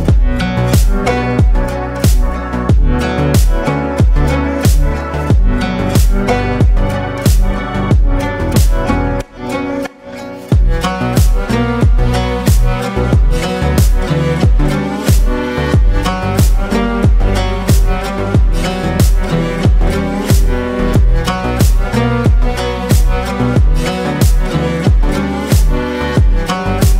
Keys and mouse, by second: 0.0 click, 1.6 click, 2.9 click, 2.9 right click, 3.9-5.0 drag, 6.4-8.0 drag, 20.9-23.0 drag, 22.3 KP_2, 23.6-24.9 drag, 24.5 KP_2.